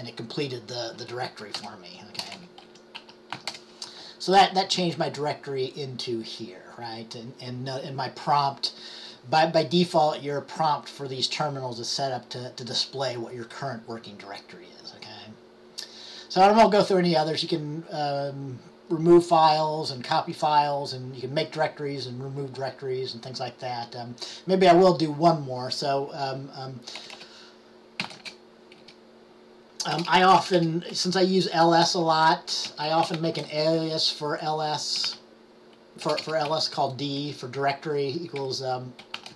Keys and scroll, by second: 3.4-4.1 typing, 27.9-28.7 typing, 30.1-33.8 typing, 34.9-37.3 typing, 38.5-39.3 typing.